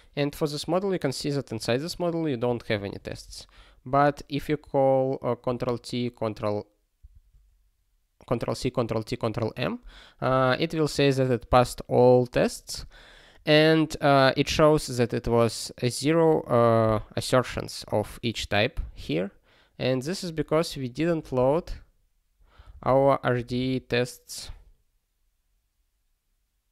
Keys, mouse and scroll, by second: 0.4 scroll up 1, 1.3 scroll down 1, 2.7 click, 6.4 ctrl+s, 20.4 super+b, 21.0 ctrl+g.